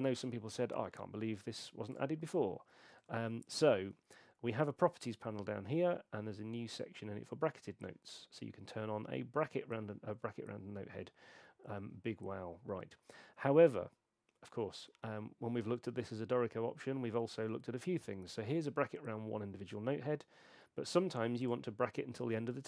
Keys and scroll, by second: 3.0 super+8.